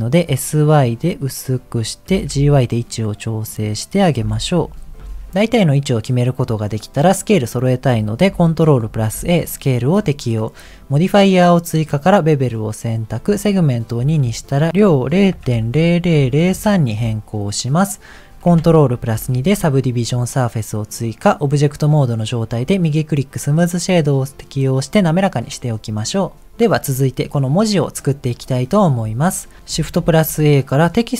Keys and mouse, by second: 2.1 g, 4.2 s, 5.6 middle click, 8.8 ctrl+a, 11.9 click, 14.4-16.7 drag, 15.8 KP_0, 19.4 ctrl+2, 30.0 shift+a.